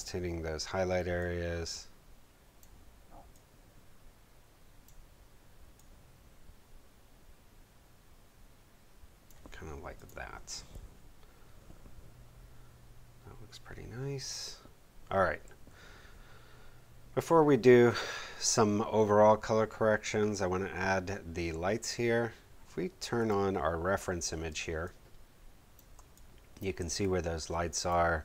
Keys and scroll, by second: 24.4 space.